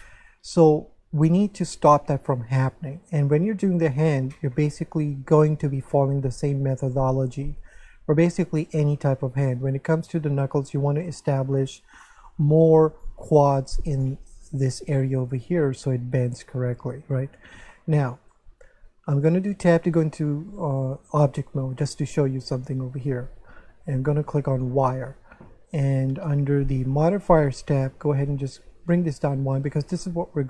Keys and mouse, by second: 17.8 shift+middle click, 19.5 Tab, 22.4 click, 24.5 click, 26.9 click, 28.8 click.